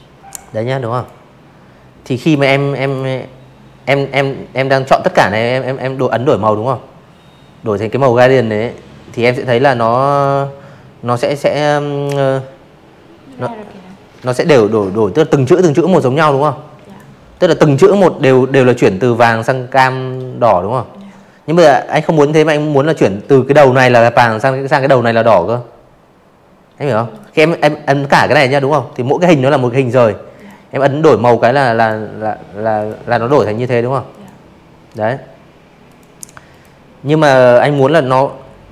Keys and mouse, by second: 2.9 click, 7.1 click, 13.8 click, 24.0 click, 24.4 click, 27.3 click, 28.7 click, 29.7 click, 30.2 click, 31.0 click, 32.8 click, 33.4 click.